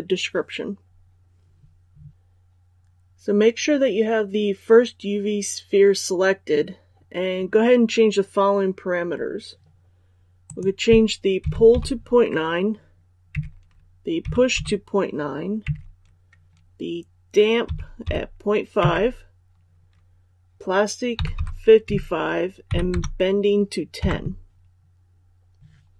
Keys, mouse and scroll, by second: 11.3 KP_Decimal, 11.6 KP_9, 13.2 Tab, 14.1 KP_Decimal, 14.4 KP_9, 15.5 Tab, 17.5 KP_Decimal, 17.9 KP_5, 18.7 Tab, 21.0 KP_5, 21.8 Tab, 22.6 KP_1, 22.8 KP_0.